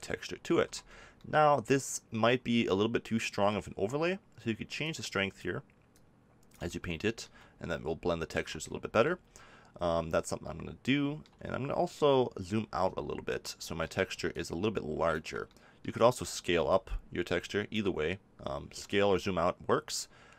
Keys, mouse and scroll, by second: 0.5 ctrl+z, 6.7-8.3 drag, 8.3 ctrl+z, 12.1 middle click, 12.4-14.3 middle drag, 18.1-20.1 drag.